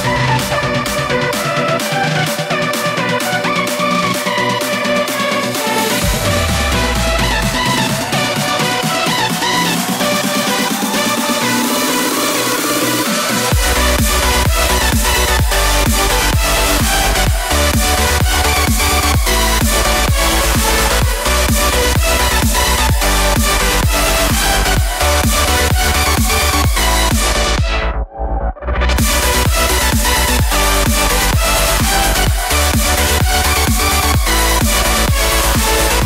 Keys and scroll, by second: 1.4 |, 1.9 alt+i, 12.5 3, 13.3 alt+3, 15.8 i, 16.8 alt+i, 33.1 3, 33.9 alt+3.